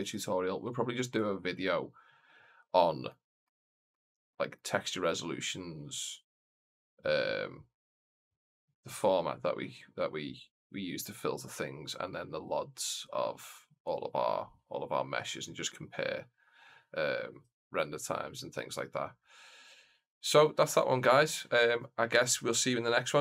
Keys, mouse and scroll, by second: 0.9 scroll down 1, 1.2-1.5 shift+middle drag, 1.6 scroll down 1, 1.7-2.2 scroll up 2, 3.0-3.4 middle drag, 3.8 shift+middle click, 4.2 middle click.